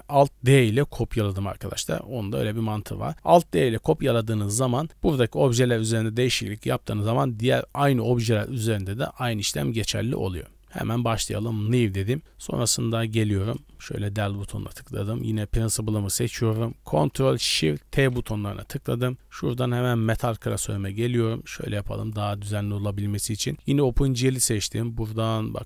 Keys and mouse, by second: 1.8-10.0 shift+middle drag, 10.1-10.8 middle drag, 11.3 click, 11.9 drag, 13.7 KP_Decimal, 14.6 middle drag, 15.0 click, 18.0 ctrl+shift+t.